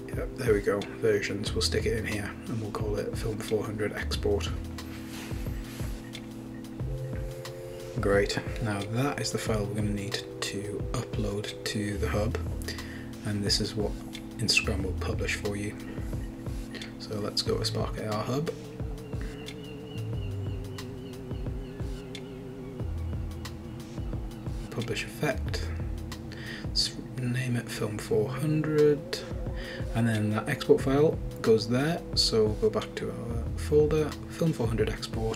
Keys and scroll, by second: 6.6-9.6 typing, 11.0 super+w, 18.3 super+Tab, 20.4 super+n, 20.7-23.5 typing, 29.6-31.3 typing.